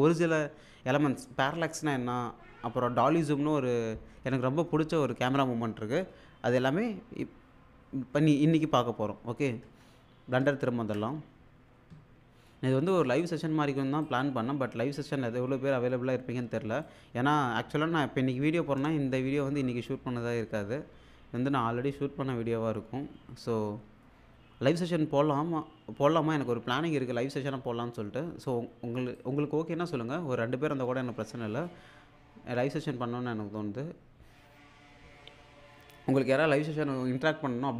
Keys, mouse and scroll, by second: 9.6 alt+Tab, 14.0-15.3 drag, 29.2-31.6 drag, 32.2-32.5 scroll up 1, 33.8-34.1 scroll down 1.